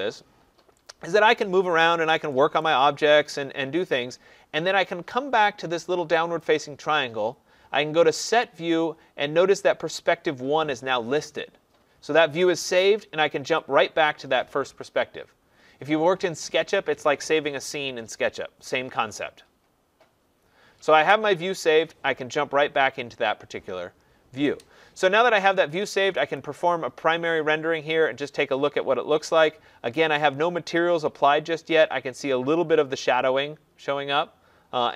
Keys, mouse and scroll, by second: 0.0 click, 0.4 middle click, 0.5 scroll, 1.1 right click, 1.4-2.3 scroll, 2.6 right click, 2.8-4.9 scroll, 6.4 click, 13.5 click, 26.3 click.